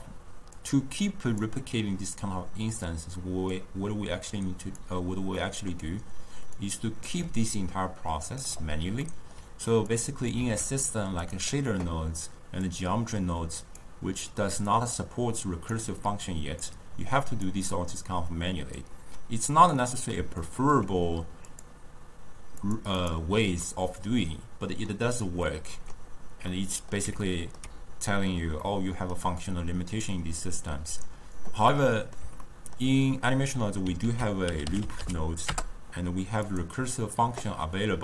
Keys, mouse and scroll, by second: 0.6 drag, 2.2 drag, 3.5 click, 5.4-6.6 middle drag, 6.6 click, 7.2 d, 7.5 right click, 8.4 d, 9.0-10.0 ctrl+middle drag, 10.0 click, 10.9 shift+d, 12.7 click, 14.7 drag, 16.7 click, 18.8 drag, 19.9-21.5 middle drag, 21.5-23.1 drag, 23.7-30.1 middle drag, 30.1 click, 30.9 click, 31.7-34.1 middle drag, 34.1 ctrl+a, 34.9 o.